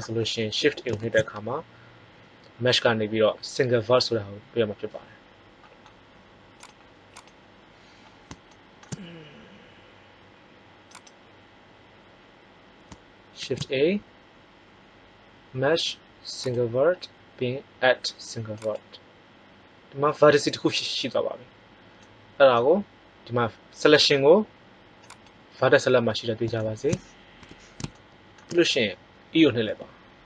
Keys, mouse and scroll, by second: 0.9 shift+a, 6.4-6.8 drag, 10.6 click, 13.3 shift+a, 21.5-23.3 middle drag, 24.9-26.6 drag, 26.4 middle click, 27.3 KP_1, 28.0 middle click, 29.5 e.